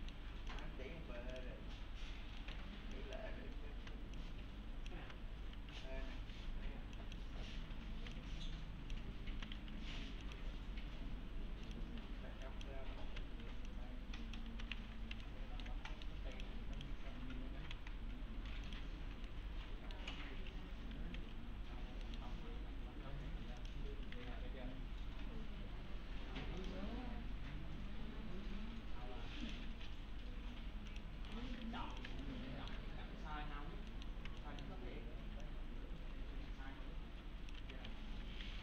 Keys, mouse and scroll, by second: 0.0 middle click, 0.5 click, 2.2 scroll down 1, 2.4 middle click, 2.6 1, 2.9 click, 3.7 s, 4.2-5.1 click, 5.0-6.3 typing, 7.0 click, 7.9 typing, 8.1-9.1 click, 9.1-10.1 typing, 12.0 1, 12.5 click, 13.0 s, 13.7-14.6 click, 14.3-15.3 typing, 14.9 scroll up 1, 15.0 scroll down 1, 15.2-15.9 alt+middle click, 16.4 click, 17.4 scroll up 1, 17.7 alt+x, 18.2-18.7 scroll down 1, 18.7 click, 19.3-20.2 alt+middle click, 20.7-21.7 typing, 21.7-22.1 scroll down 1, 22.1 middle click, 22.1-23.6 scroll up 1, 23.6 click, 24.2 alt+1, 26.6 click, 29.4 click, 31.3 right click, 31.6 4, 31.9 click, 32.2-32.9 alt+middle click, 32.9-33.9 scroll up 1, 33.9 middle click, 34.4 alt+middle click, 35.4-37.6 click, 37.3-38.4 typing, 38.1 scroll down 1.